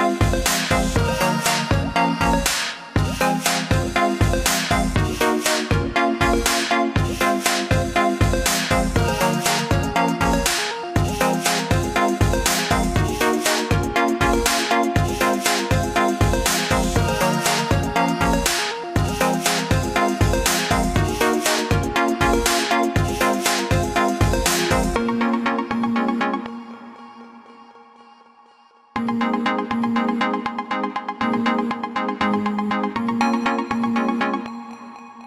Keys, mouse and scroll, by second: 0.1 click, 1.3 scroll down 1, 2.0 scroll up 1, 3.4 click, 4.9 click, 6.5 click, 7.2 scroll down 1, 8.4 click, 10.0 click, 10.8 click, 11.5 click, 12.0 click, 14.3 click, 15.5 click, 16.6 click, 17.0 click, 17.5 click, 17.9 click, 18.5 click, 19.1 click, 20.3 click, 21.3 scroll up 1, 21.9 click, 22.8 scroll down 1, 23.7 scroll up 1, 24.5 scroll down 2, 25.4 scroll up 1, 26.3 click, 29.1 scroll down 1, 30.0 scroll down 1, 30.7 click, 32.2 ctrl+g, 34.0 click.